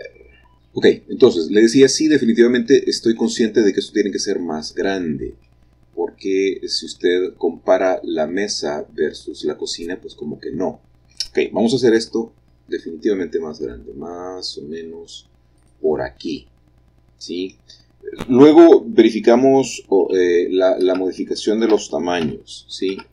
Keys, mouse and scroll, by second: 2.2-3.9 middle drag, 2.2-2.6 scroll up 1, 5.6-7.9 middle drag, 5.7-7.9 scroll down 1, 9.5-11.8 middle drag, 11.8 s, 15.5-16.6 drag, 19.2 g, 19.9 z, 20.7 Escape, 21.6 f, 22.1 x, 22.8 Escape.